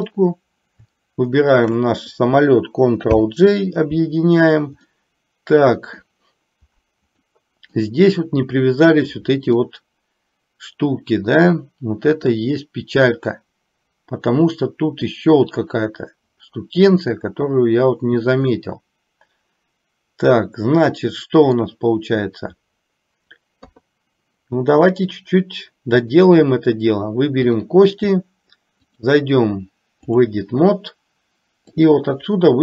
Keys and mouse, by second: 0.0 click, 1.6 shift+click, 3.2 ctrl+j, 5.1-6.3 middle drag, 7.5 middle click, 9.7-15.3 middle drag, 18.7-21.9 middle drag, 23.6 KP_3, 26.2 click, 28.9-30.2 drag, 31.9 click.